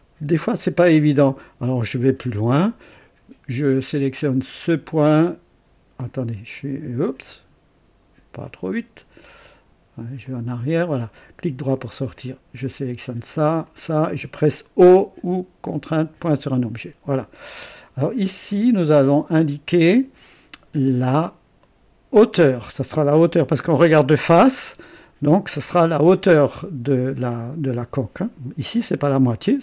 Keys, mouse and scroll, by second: 1.6 click, 2.2 right click, 4.6 click, 6.0 click, 8.4 click, 10.2 click, 11.0 right click, 12.6 click, 13.6 click, 16.1 typing, 19.0 click.